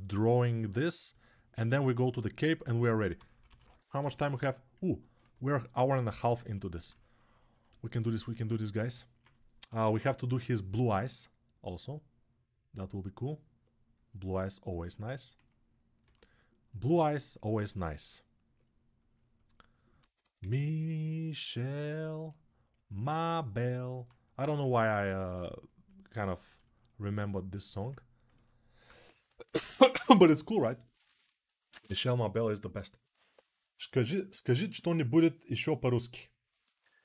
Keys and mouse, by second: 3.1 ], 9.6 [, 15.8 s, 19.7 ctrl+z, 20.0 ctrl+z, 23.4-27.6 alt+drag, 28.1-37.0 ctrl+alt+drag.